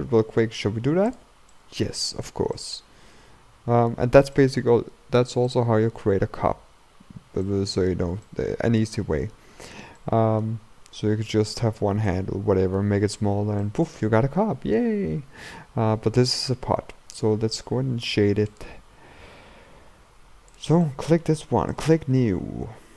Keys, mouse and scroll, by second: 1.1 click, 1.6-15.8 shift+middle drag, 15.8-16.5 scroll down 2, 16.5-18.9 scroll up 1, 18.9 scroll up 1, 18.9 click, 19.7-20.6 scroll up 3, 20.6 click, 20.9-22.9 middle drag.